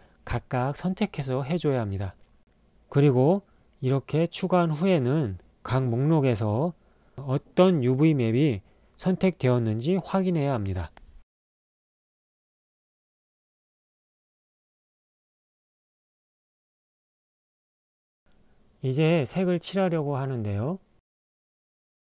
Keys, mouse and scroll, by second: 1.3-3.0 drag, 3.4 g, 5.4 Tab, 7.6 a, 8.3 Tab, 9.5 click, 10.4 click, 11.2 click, 11.9 click, 12.6 click, 16.2 click, 17.2 click.